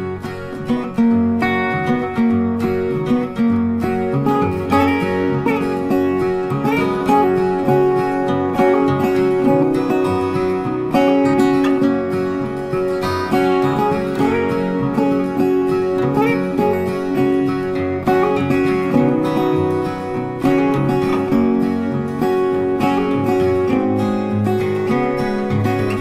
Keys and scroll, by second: 2.2 ctrl+c, 2.3 ctrl+f, 10.2 ctrl+x, 10.4 ctrl+f, 11.4 ctrl+z, 12.1 ctrl+f, 14.0 ctrl+c, 14.1 ctrl+f, 24.3 ctrl+z.